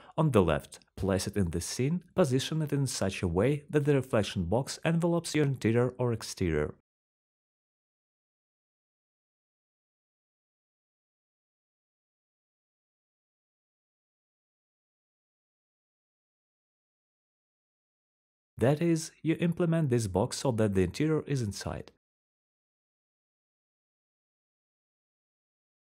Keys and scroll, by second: 0.0-1.1 typing, 2.8-3.5 typing, 8.3-11.1 typing, 14.0 alt+k, 14.5 alt+k, 20.0-20.8 typing, 23.7 alt+g, 24.0-24.7 typing.